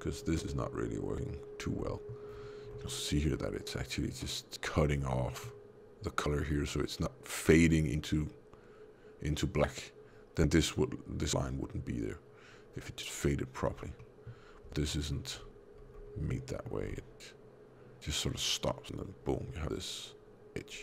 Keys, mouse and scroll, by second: 0.2 click, 1.8 middle click, 2.2 scroll up 4, 3.2 scroll up 3, 5.1 middle click, 13.6-14.1 scroll down 4, 13.9 middle click, 14.6 Tab, 14.9 middle click, 15.2 scroll up 1, 15.6 scroll down 1, 16.4 middle click, 16.7 scroll up 1.